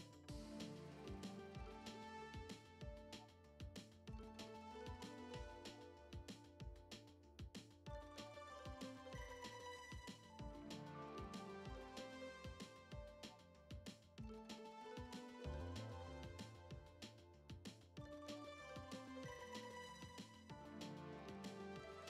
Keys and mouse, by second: 1.0-2.2 drag, 2.2 middle click, 3.2 click, 5.2 shift+middle click, 5.8 shift+middle click, 6.2 Tab, 7.0 click, 7.5 click, 7.9 click, 8.8 shift+middle click, 9.7 alt+z, 9.7 click, 10.3 ctrl+z, 10.4 shift+click, 10.9 shift+click, 11.8 shift+click, 12.3 alt+z, 12.7 drag, 13.0 ctrl+Tab, 15.7-16.0 drag, 16.5 shift+middle drag, 17.1 click, 17.6-19.0 drag, 19.4-20.8 drag.